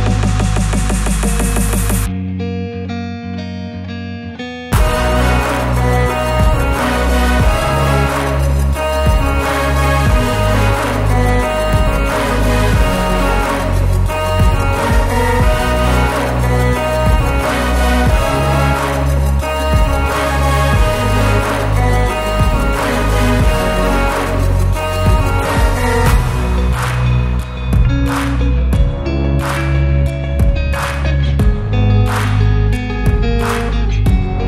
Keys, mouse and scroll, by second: 0.2 Tab, 0.3 click, 0.5 Tab, 0.7 a, 0.8 e, 1.6 ctrl+r, 2.6 Tab, 2.9 Tab, 3.2 3, 3.3 click, 3.4 s, 5.4 Tab, 5.6 s, 7.7 scroll up 2, 7.9 shift+middle click, 8.1-11.0 typing, 9.3 Tab, 10.2 click, 10.6 click, 11.3 scroll down 2, 11.6-12.0 shift+middle drag, 12.0 click, 12.2 Tab, 12.5 shift+z, 12.6 click, 13.0 click, 13.3 Tab, 13.8 shift+z, 14.3 click, 14.5 scroll down 2, 14.8-15.2 scroll up 2, 14.9 shift+middle drag, 15.2 Tab, 15.5 3, 15.6 click, 16.0 click, 16.8 e, 17.3 scroll up 2, 17.6 shift+middle click, 18.0 3, 18.3 alt+click, 18.7 r, 20.2 o, 20.4 r, 22.5 alt+click, 22.9 g, 24.6 alt+click, 24.9 r, 26.0 s, 26.5 Tab, 26.7-27.4 scroll down 5, 27.4 shift+middle drag, 27.7 scroll up 1, 27.9 click, 28.0 Tab, 28.4-30.9 typing, 28.6 alt+click, 30.2 Tab, 30.3 click, 30.5 Tab, 32.1 Tab, 32.3 Tab, 32.7 3, 32.9 alt+click, 33.2 g.